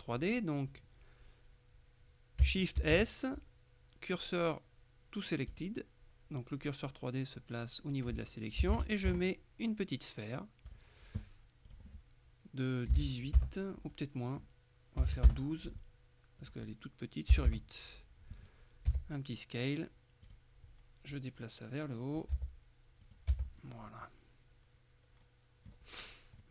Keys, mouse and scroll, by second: 0.8 click, 2.9 shift+s, 5.6 click, 8.8 shift+a, 10.8 click, 11.8 click, 13.0 KP_1, 13.1 KP_8, 13.5 KP_Enter, 14.4 click, 15.1 KP_1, 15.4 KP_Enter, 16.5 click, 17.4 KP_8, 17.6 KP_Enter, 19.0 s, 20.4 click, 21.2-22.8 drag, 22.4 s, 23.1 click, 23.4 Tab, 23.6-24.1 scroll down 1, 24.1 middle click, 26.0-26.5 scroll down 1.